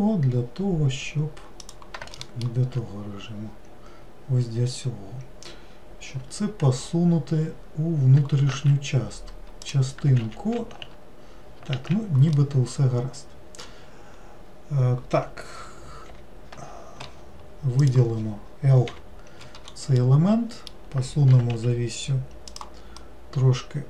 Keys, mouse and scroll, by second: 2.2 alt+middle click, 3.1-3.5 scroll down 2, 6.1 g, 11.7 alt+z, 12.4-15.6 middle drag, 16.1 l, 17.8 click, 20.0-21.4 middle drag, 21.4 g, 23.0-23.8 middle drag.